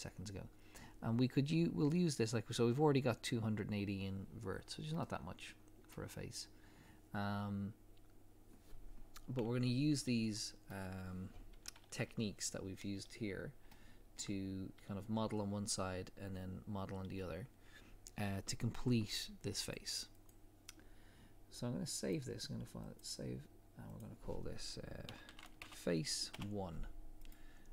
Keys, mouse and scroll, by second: 4.5 scroll down 1, 5.0 middle click, 12.0 KP_3, 13.1-13.7 scroll up 1, 13.7 shift+middle click, 14.3 scroll up 1, 19.6 click.